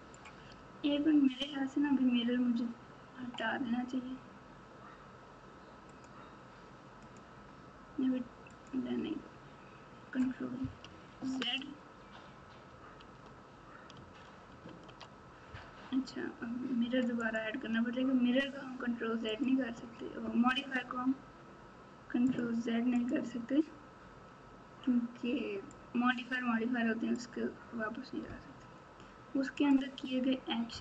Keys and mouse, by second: 5.9 click, 7.0 click, 8.5 click, 11.1 ctrl+z, 12.9 ctrl+z, 14.4 ctrl+shift+z, 17.3-19.4 drag, 22.2 click, 25.6-27.1 drag, 29.5 click.